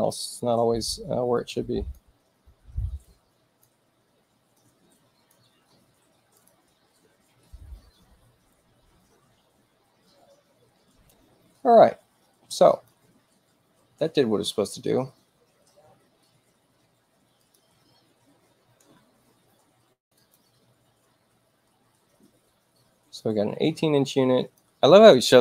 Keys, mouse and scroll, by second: 1.3 click, 3.0 click, 4.5 click, 6.3 click, 10.7 space, 12.7 click, 13.4 space, 16.7 space, 17.3 click, 20.0 click, 23.2-24.4 drag.